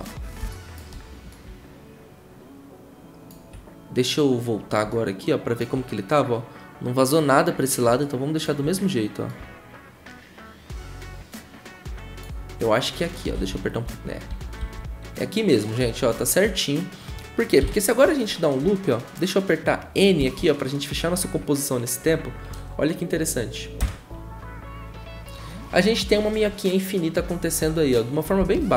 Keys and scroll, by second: 13.3 Left, 13.8 Right, 14.3 Right, 14.6 Left, 17.6 shift+`, 20.2 n, 23.8 0.